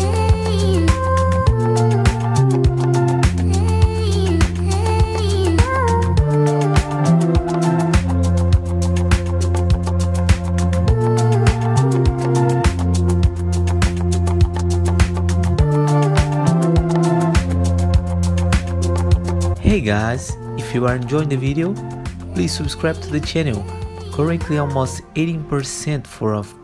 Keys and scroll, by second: 0.2-2.4 typing, 0.5 F3, 1.1 F4, 2.6 ctrl+s, 3.1 F4, 12.0 F4, 12.9 F4, 22.5 alt+F4, 23.4 F3.